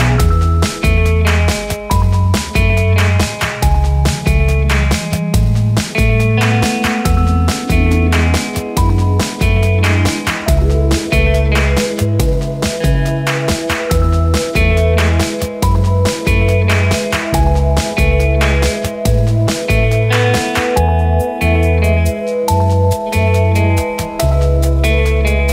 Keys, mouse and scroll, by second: 0.7 ctrl+g, 1.3-2.7 drag, 3.0 scroll down 1, 3.9 click, 4.4 scroll up 1, 5.3 click, 7.5 scroll down 1, 8.1 click, 8.4 scroll down 1, 9.3-12.4 drag, 13.3 scroll up 1, 14.2-15.8 drag, 15.8 shift+right click, 16.6 scroll down 1, 17.8 click, 19.2 ctrl+g, 19.4 click, 22.3 scroll down 1, 22.9-25.5 drag.